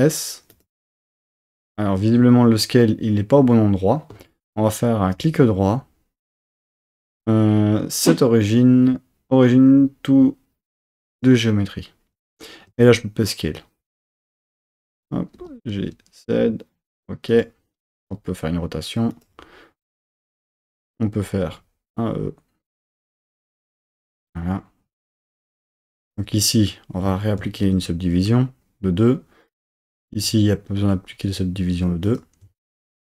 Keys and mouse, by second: 0.8 super+z, 12.7 s, 13.9 click, 15.4 g, 15.8 z, 17.3 click, 18.0 r, 19.1 click, 20.5 Tab, 21.5 e, 22.7 click, 23.5 Tab, 27.5 super+2, 29.5 click, 30.9 r, 32.1 click.